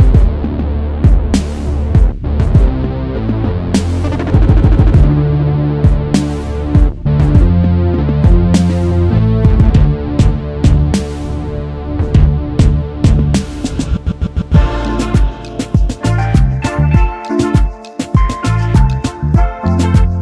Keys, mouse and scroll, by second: 0.0 double click, 1.2-1.6 alt+scroll down 1, 2.7 right click, 4.4 space, 4.5 double click, 4.8-5.5 alt+scroll down 1, 5.6 alt+scroll up 1, 6.1 space, 6.1 double click, 6.4 space, 9.0 m, 13.0 v, 14.1 typing, 16.2 typing, 17.2-17.9 alt+scroll up 1, 18.0-18.4 alt+scroll up 1, 18.4 space, 18.5 double click, 18.8 space, 19.7 space.